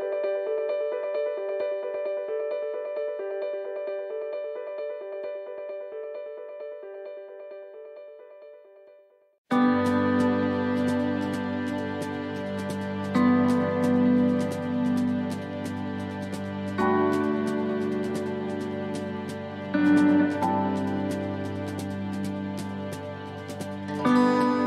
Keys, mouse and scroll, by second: 0.0 click, 2.1 middle click, 3.2 shift+middle click, 4.0 middle click, 4.6 right click, 5.4 ;, 6.1 l, 7.2 click, 9.0 click, 10.5 middle click, 11.3 middle click, 12.8-13.8 scroll down 7, 13.8 middle click, 14.3 shift+middle click, 15.5 click, 16.6 scroll down 4, 17.0 shift+middle click, 17.0 shift+scroll up 1, 17.4 shift+scroll down 2, 17.8 shift+middle click, 18.4 scroll down 1, 18.8 shift+middle click, 19.6 middle click, 20.2 shift+middle click, 21.0-21.4 scroll up 3, 21.4 middle click, 21.9 shift+middle click, 22.7 middle click, 23.1 shift+middle click, 23.5 scroll up 3, 24.3 right click.